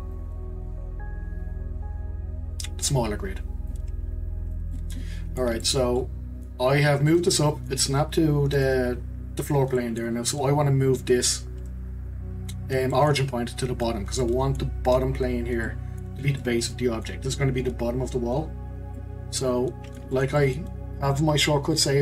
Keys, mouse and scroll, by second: 0.1 click, 4.0-4.7 scroll down 6, 4.7-6.9 middle drag, 6.9-7.3 scroll up 1, 7.3-12.8 middle drag, 12.9-18.7 middle drag, 18.7 scroll down 2, 18.9-22.0 middle drag.